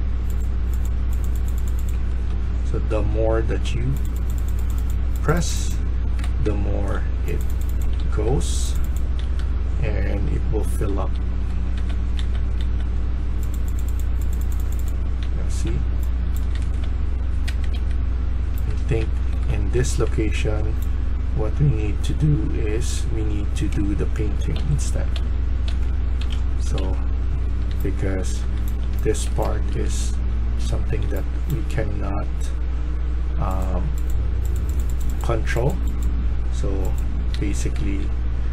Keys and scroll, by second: 1.6-38.5 typing, 17.3 Escape.